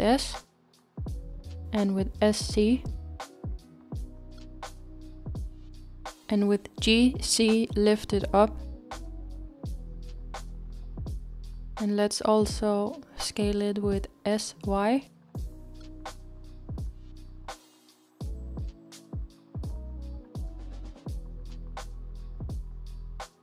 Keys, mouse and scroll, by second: 10.8-14.1 middle drag, 14.1-16.3 s, 16.3-16.7 scroll down 1, 16.7-19.4 middle drag, 19.4 s, 22.3-23.4 middle drag.